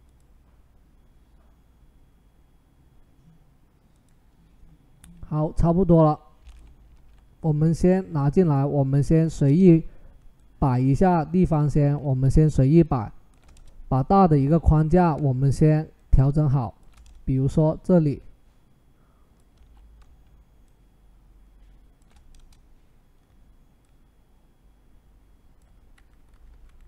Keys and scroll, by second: 6.7 ctrl+t, 9.3 Return, 11.7 ctrl+t, 13.3 Return, 14.6 ctrl+t, 16.8 Return, 19.4 ctrl+t, 22.1 Return, 26.1 Up, 26.7 Left, 26.7 Up.